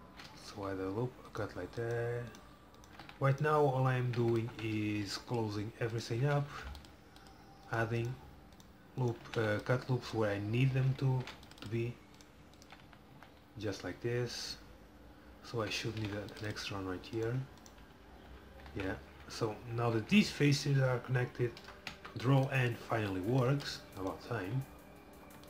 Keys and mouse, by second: 0.3-1.4 middle drag, 6.7 ctrl+r, 9.3 f, 11.3 ctrl+r, 12.9 f, 13.2 f, 16.0 ctrl+r, 18.0-20.3 typing, 21.6 ctrl+n, 22.0 a, 22.6 middle click, 22.7 middle click.